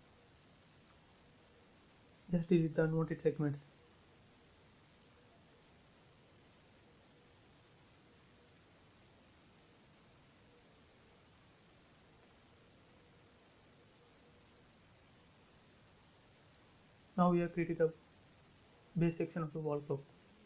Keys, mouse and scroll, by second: 0.7 Delete, 2.5 scroll up 1, 3.7 click, 5.2 ctrl+z, 6.3 ctrl+z, 7.3 l, 8.4 click, 9.5-9.9 scroll down 1, 11.2 click, 11.3 space, 12.0 click, 14.9 Delete, 15.5-16.1 scroll down 1, 16.1 middle click, 16.7 scroll down 1, 16.9 shift+middle click, 18.1 a, 18.7 click.